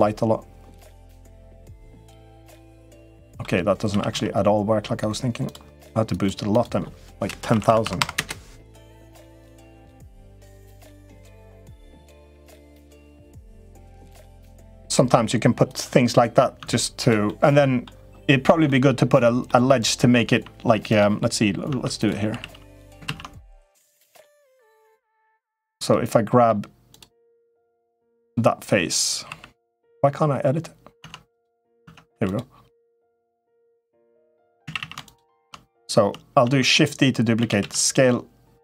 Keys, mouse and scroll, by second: 2.9 middle click, 3.6 s, 5.9 click, 6.4-8.6 drag, 7.4 0, 7.6 0, 10.0-11.7 drag, 12.4-14.7 drag, 15.9 Tab, 16.3 Tab, 16.8 click, 17.0 middle click, 18.4 middle click, 19.2 middle click, 20.1 Tab, 20.6 click, 21.4 Tab, 22.1 3, 22.9 ctrl+z, 23.7 Tab, 24.0 3, 25.0 3, 25.2 click, 25.6 middle click, 27.7 3, 27.9 click, 29.0 3, 29.4 click, 30.8 Tab, 31.1 click, 31.6 Tab, 31.9 3, 32.7 click, 33.0 middle click, 34.4 a, 34.5 a, 34.8 shift+click, 36.2 shift+d, 37.1 s.